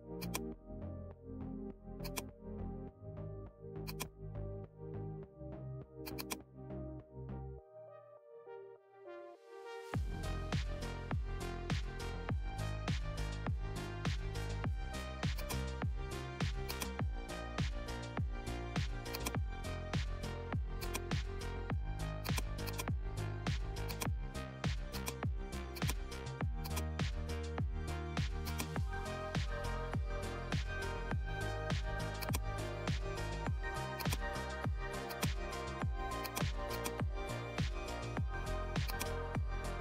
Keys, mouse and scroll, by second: 2.0-6.0 drag, 7.8 Return, 12.0 Return, 12.3 alt+scroll up 1, 12.4 alt+scroll down 1, 13.5 alt+scroll up 1, 15.3-19.1 drag, 20.8 click, 27.3 right click, 28.4 click, 32.1-39.8 drag.